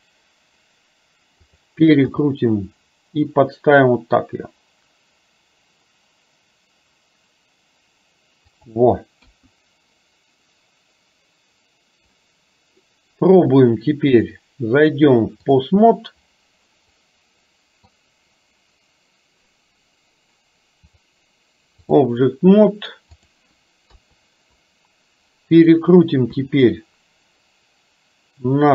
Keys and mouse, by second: 2.1 g, 9.3 KP_1, 14.2-15.6 drag, 17.0 middle click, 21.0-22.1 drag, 23.9 KP_3, 26.4 r.